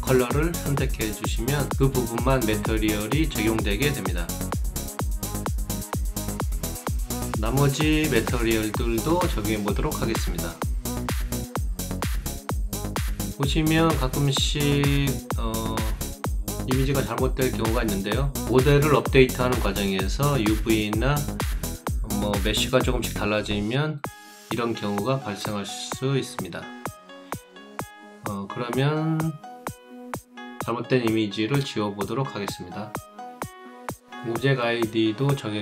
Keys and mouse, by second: 1.1 click, 5.7 click, 11.1 click, 13.8 alt+middle click, 14.6 alt+right click, 15.3 alt+middle click, 15.8 alt+right click, 18.5-21.7 alt+right drag, 26.3 right click, 27.4 alt+right click, 28.4 alt+click, 29.7 click, 32.8 click, 34.3 click.